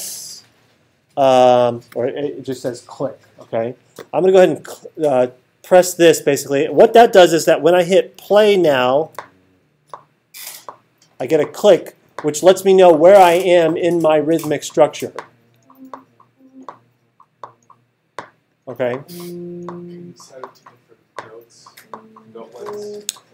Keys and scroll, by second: 9.0 space.